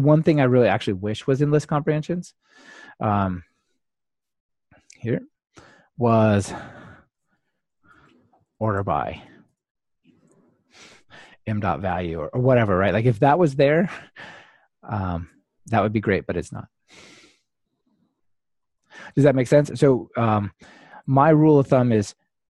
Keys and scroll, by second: 19.4 ctrl+Tab.